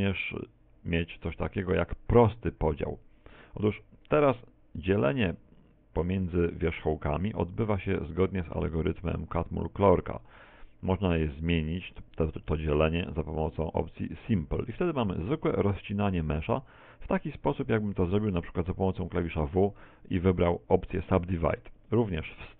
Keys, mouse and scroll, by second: 6.0 Tab, 11.5 Tab, 13.7 click, 16.8 Tab, 17.7 a, 17.9 a, 18.4 w.